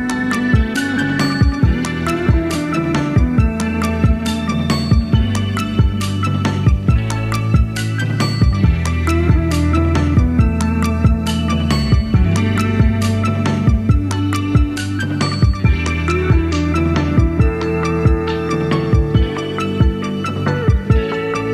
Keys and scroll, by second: 0.2 Right, 3.8 super+d.